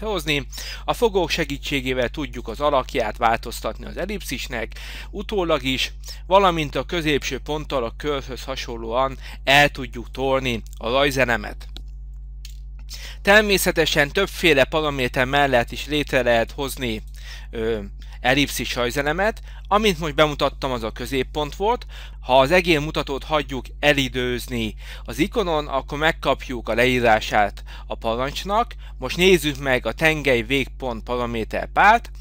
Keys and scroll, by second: 12.5 Delete.